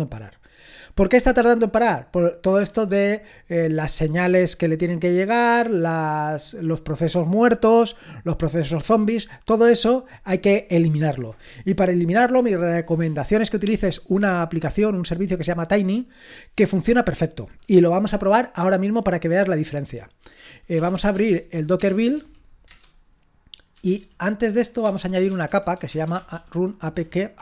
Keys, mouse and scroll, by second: 20.5-22.7 typing, 23.7-27.0 typing.